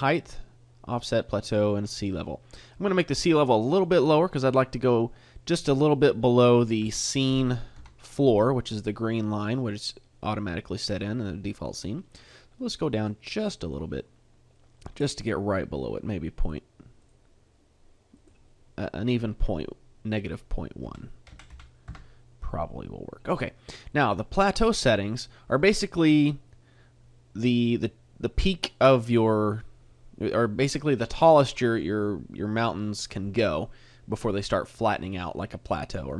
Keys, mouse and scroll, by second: 5.3 middle click, 6.8 KP_3, 7.8 KP_5, 9.3 middle click, 10.8 middle click, 13.0 click, 13.6 click, 14.6 middle click, 16.4 click, 17.0 click, 18.8 click, 20.1 click, 23.9 middle click, 24.4-25.2 scroll up 2, 25.2 middle click.